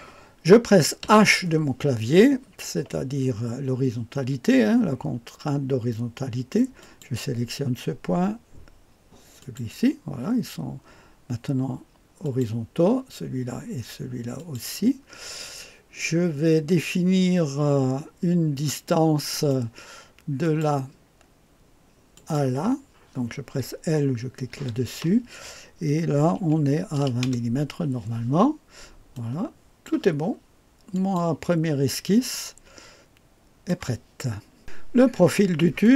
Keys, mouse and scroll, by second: 1.0 h, 6.8 click, 9.4 click, 12.2 click, 14.3 click, 19.3 right click, 20.4 click, 22.1 click, 26.3 KP_2, 26.9 KP_0, 27.2 Return, 29.1-33.7 drag, 35.8 click.